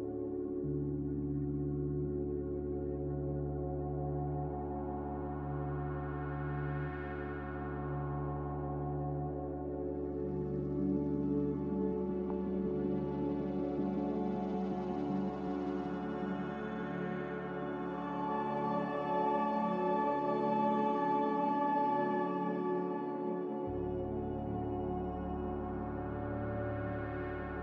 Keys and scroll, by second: 22.7 n.